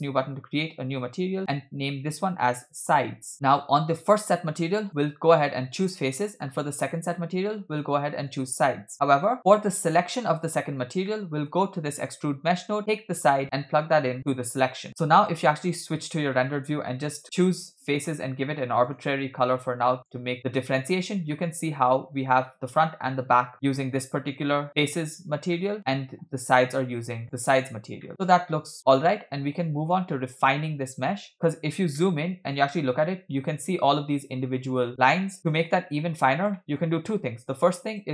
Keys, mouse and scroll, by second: 1.4-3.3 drag, 3.3 scroll up 4, 3.5 click, 4.9-5.9 drag, 6.8 click, 7.5-8.5 drag, 9.6 click, 10.8-11.1 scroll down 2, 11.1 middle click, 11.6-12.1 scroll up 2, 12.1 click, 13.3-14.3 drag, 15.9 click, 16.3-16.7 middle drag, 17.6 click, 18.0-18.5 scroll down 2, 18.9 drag, 21.4-22.9 middle drag, 23.9-25.5 scroll up 1, 25.5 scroll up 3, 25.6 middle click, 27.3 click, 28.1-30.4 middle drag, 31.0-31.6 scroll up 5, 31.3 shift+middle click, 31.9-32.6 middle drag, 35.4-36.0 middle drag, 35.4 scroll down 2, 36.5 middle click, 36.8-37.3 scroll up 4, 37.4 shift+a.